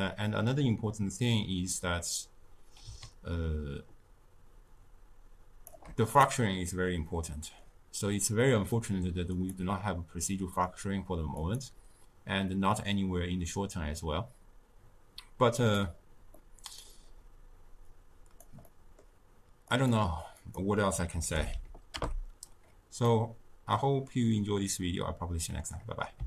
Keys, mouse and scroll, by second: 7.0-9.3 middle drag, 9.3 click, 11.3 click, 15.7-16.3 drag, 16.3-17.8 middle drag, 17.8 click, 18.6-19.6 middle drag, 19.6-22.6 drag, 23.0-26.0 middle drag.